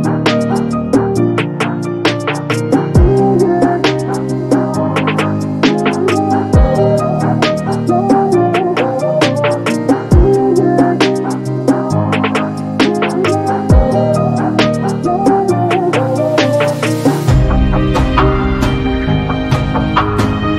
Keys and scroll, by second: 0.6 2, 1.1 Return, 3.7 Escape, 4.3 space, 11.6 t, 14.3 6, 14.6 0, 15.0 Return, 16.7 r, 19.8 space.